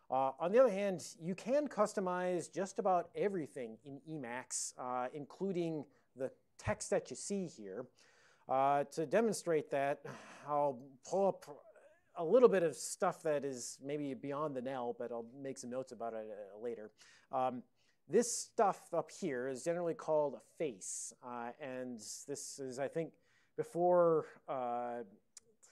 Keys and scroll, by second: 0.0-0.4 typing, 0.5 Return.